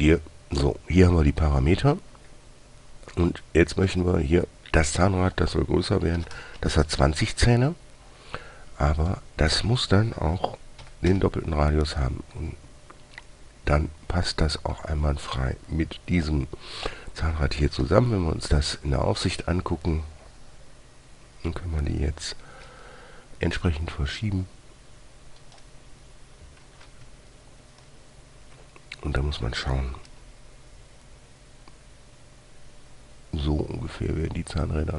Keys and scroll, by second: 6.5-6.9 typing, 11.2 typing, 18.2 typing, 23.0 g, 27.0 <, 30.4 g.